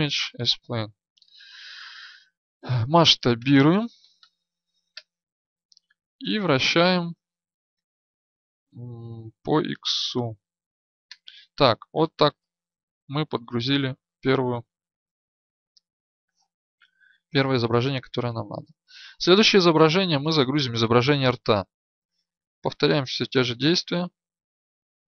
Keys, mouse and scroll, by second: 2.7 s, 13.2-25.1 middle drag.